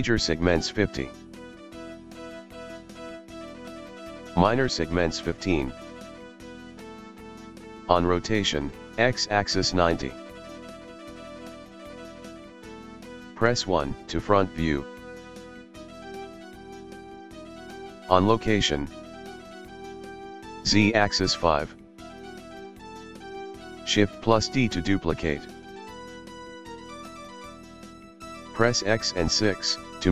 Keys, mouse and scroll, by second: 0.0 click, 3.8 click, 8.2-11.3 drag, 13.0 click, 13.3 KP_1, 16.4 click, 16.6 click, 17.3-17.9 scroll up 1, 19.4-22.6 drag, 24.0 shift+d.